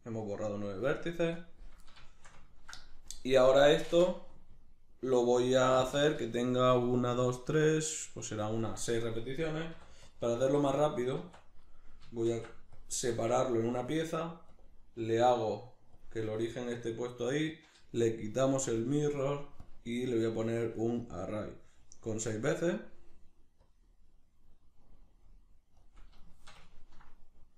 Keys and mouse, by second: 2.1-10.8 ctrl+shift+middle drag, 10.8 right click, 11.2 Tab, 11.6 right click, 12.3 shift+s, 13.2 Tab, 14.5-26.3 drag, 26.3-27.5 shift+middle drag.